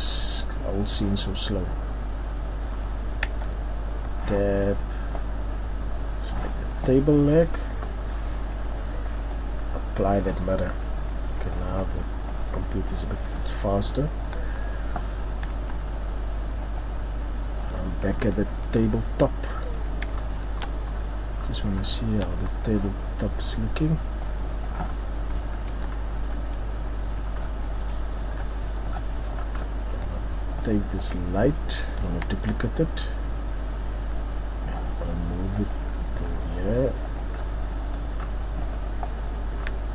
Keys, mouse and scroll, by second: 0.6-1.2 scroll up 1, 1.2-1.7 scroll up 1, 1.7 middle click, 3.8 Tab, 5.0 middle click, 5.5-5.9 scroll down 1, 5.9 right click, 9.7 click, 10.5-10.8 scroll down 2, 10.8 middle click, 11.8-12.5 scroll up 4, 12.5 middle click, 12.7 scroll down 2, 12.9 middle click, 13.9-14.8 scroll up 1, 14.8 Tab, 15.9 Tab, 16.9 right click, 18.2-18.8 ctrl+scroll down 5, 18.8 scroll up 1, 18.9 middle click, 20.1-20.9 shift+scroll up 7, 21.4-21.7 scroll up 5, 21.8-23.6 shift+scroll down 6, 24.9 click, 24.9-25.7 scroll down 5, 25.9-26.3 scroll up 3, 26.3 middle click, 27.4 scroll down 1, 28.3 scroll down 1, 28.3 KP_7, 28.9-29.4 scroll down 3, 29.4 scroll up 1, 29.5-30.6 scroll down 2, 30.6 right click, 31.0 right click, 32.3 shift+d, 36.4 Tab, 36.4 click, 36.4 middle click, 37.4 right click, 37.4-37.7 scroll down 1, 37.7 middle click, 38.2 scroll up 1, 39.3 right click, 39.3 middle click, 39.3 scroll up 1.